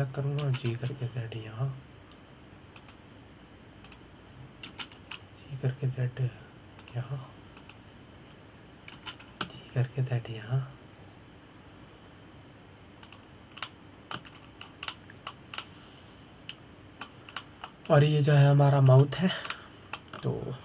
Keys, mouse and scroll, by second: 1.3 click, 2.1 g, 4.5 click, 5.5 click, 6.3 g, 8.5 click, 9.2 click, 10.6 g, 14.8 click, 15.3 middle click, 16.0-16.3 scroll up 4, 16.3 scroll down 3, 16.6-19.4 middle drag, 19.4-20.3 scroll up 2, 20.3-20.6 scroll down 1.